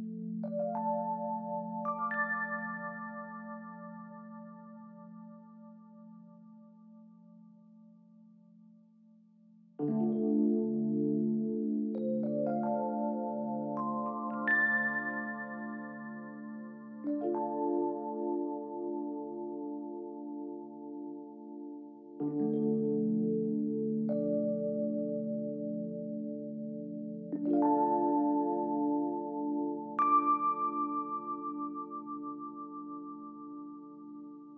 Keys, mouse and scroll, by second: 4.7 shift+click, 18.7 ctrl+0, 20.2 space, 26.6-27.5 typing, 28.7 double click, 28.8 space, 33.4 double click, 33.5 space, 34.4 shift+click.